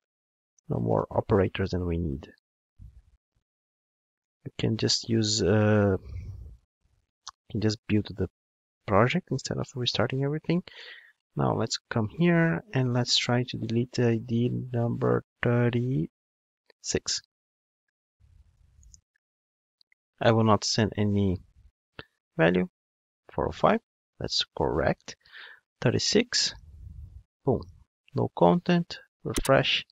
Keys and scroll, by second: 0.9 alt+super+l, 9.2 super+F9.